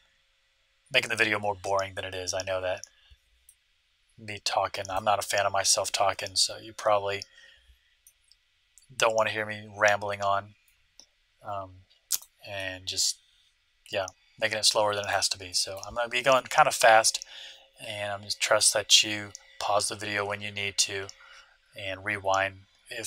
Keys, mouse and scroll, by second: 3.4-5.2 middle drag, 8.0-9.9 middle drag, 12.5-14.3 middle drag, 15.4-17.2 middle drag.